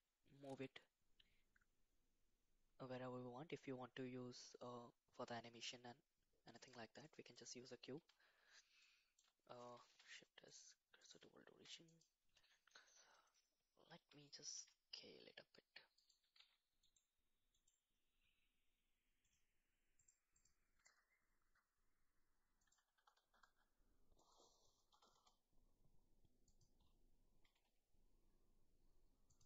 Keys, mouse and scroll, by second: 8.0 KP_1, 9.1-9.7 shift+middle drag, 9.9 shift+s, 11.4 shift+s, 13.8 g, 14.5 s, 16.2 f, 16.3 z, 17.5 click, 19.9 click, 20.4 click, 20.7 g, 22.9 s, 24.9 s, 27.3 g.